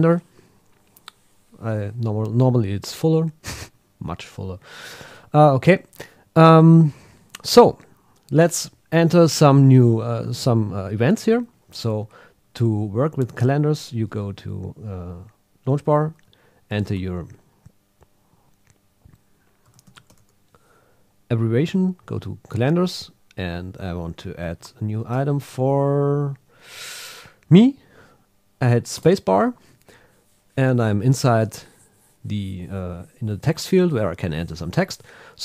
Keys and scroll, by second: 21.3 Down, 22.0 Right, 23.1 Down, 25.1 Up, 25.5 Down.